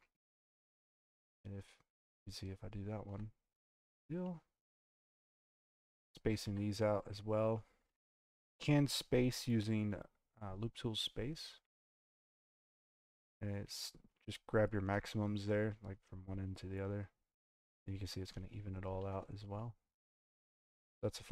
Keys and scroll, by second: 20.4 space.